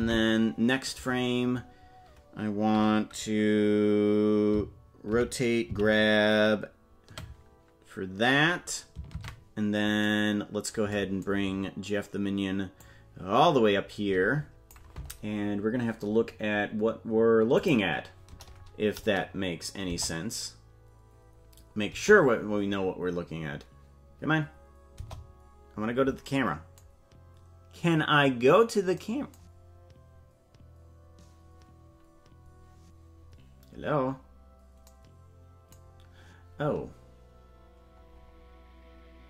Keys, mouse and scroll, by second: 0.0 Right, 5.1 alt+r, 5.7 alt+g, 9.1 ctrl+Tab, 12.8-14.7 drag, 16.1-17.6 scroll down 3, 19.1 click.